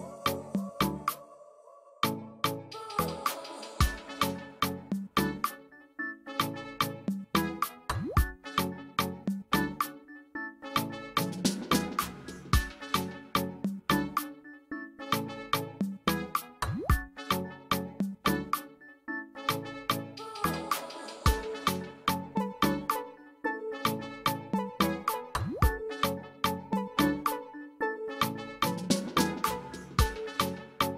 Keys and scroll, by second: 21.8 ctrl+alt+z, 24.7 ctrl+alt+z.